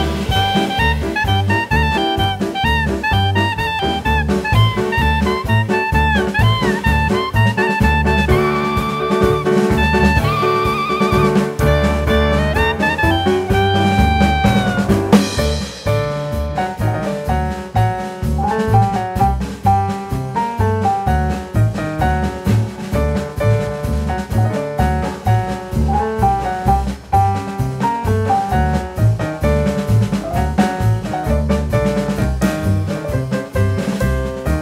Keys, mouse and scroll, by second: 5.2 middle click, 6.6 Tab, 7.1 Tab, 7.5 Tab, 7.8 middle click, 8.8 click, 9.4 click, 10.0 click, 10.6 middle click, 13.3 click, 13.9-14.4 scroll down 3, 14.5 click, 15.7 middle click, 15.7 scroll up 1, 16.0 shift+middle click, 18.3 click, 18.9 click, 25.1 click, 27.9 middle click, 32.8 click.